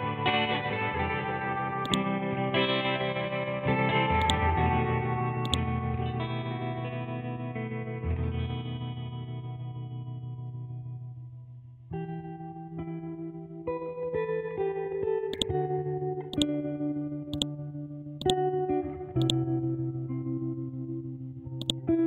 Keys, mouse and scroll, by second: 0.7-1.1 scroll up 1, 1.8-3.3 drag, 3.3-3.6 scroll down 1, 4.2-7.1 drag, 7.1 ctrl+Home, 8.0 Down, 11.1 Left, 12.1 Up, 12.9 Right, 15.3-22.0 drag.